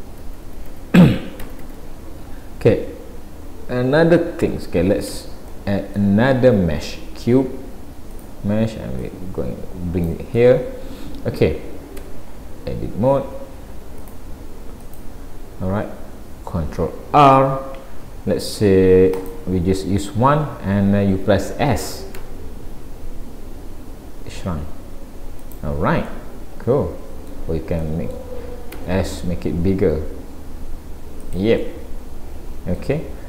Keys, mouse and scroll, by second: 0.3 ctrl+z, 0.3 scroll down 1, 2.0 scroll up 1, 4.6-5.1 scroll down 1, 5.1 Tab, 5.5 middle click, 6.4 shift+a, 9.0 click, 10.4 middle click, 12.1 Tab, 12.6 scroll up 1, 14.0 click, 14.9 click, 17.2 ctrl+r, 26.1 middle click, 27.8 middle click, 28.8 s, 31.6 middle click, 33.0-33.2 scroll down 2.